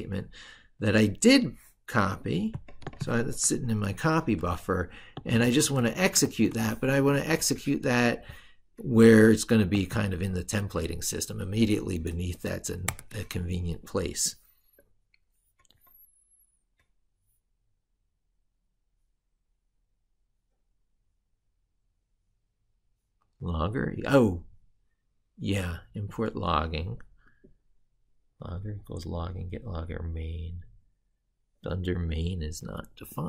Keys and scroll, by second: 3.4 ctrl+super+Right, 5.2 ctrl+v, 6.2 ctrl+z, 10.6 ctrl+v.